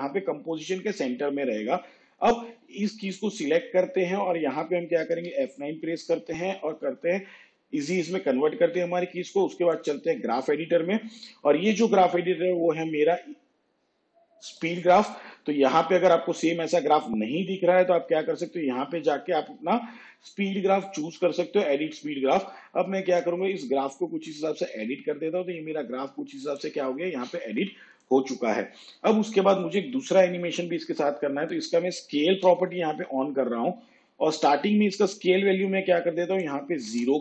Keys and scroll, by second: 5.4 F9, 32.5 shift+s, 37.1 0.